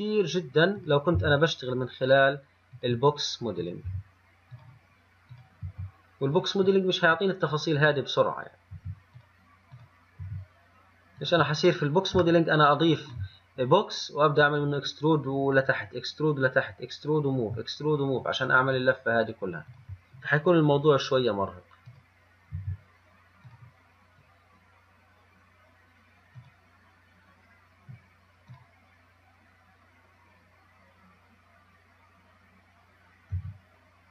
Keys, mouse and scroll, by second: 1.0 click, 1.4 g, 3.8 click, 4.1 g, 5.5 click, 5.9 g, 7.7-9.0 scroll down 2, 9.0 g, 10.0 click, 10.5 g, 11.8-12.2 scroll down 2, 12.7-19.9 shift+middle drag, 19.9 click, 22.1 click, 22.8 g, 26.6 click, 28.8 click, 33.6 g.